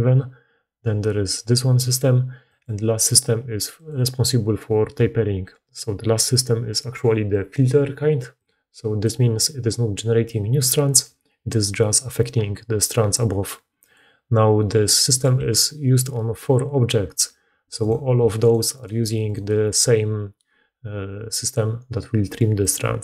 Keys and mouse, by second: 2.4 click, 3.6 click, 8.3-22.6 drag, 17.7 middle click, 17.7 right click, 18.1 g, 18.6 right click, 18.9 g.